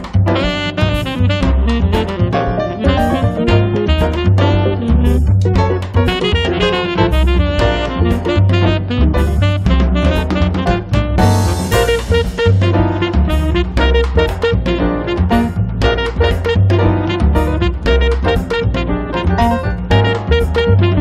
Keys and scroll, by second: 1.9 p, 4.7-5.6 typing, 18.5 5, 18.8 Return.